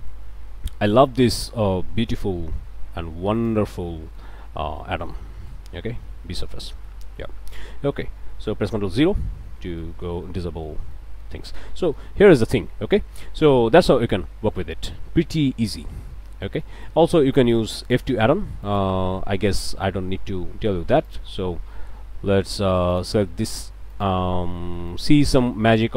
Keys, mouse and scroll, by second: 1.4 ctrl+shift+click, 2.2 e, 3.4 click, 3.9 click, 4.5 scroll down 2, 4.9 Tab, 5.1 click, 5.9 Tab, 6.3 scroll down 1, 6.6 Tab, 6.9 right click, 8.9 ctrl+0, 9.8 click, 10.2 alt+a, 10.4 alt+click, 10.9 alt+click, 11.4 scroll down 2, 11.6 Tab, 11.9 click, 12.6 scroll up 2, 12.9 click, 14.5-15.9 drag, 16.1 click, 16.9-17.3 scroll up 1, 17.3 click, 17.9 click, 18.6-20.0 ctrl+drag, 21.0 shift+click, 22.9 click, 23.9 ctrl+click, 25.2 ctrl+click.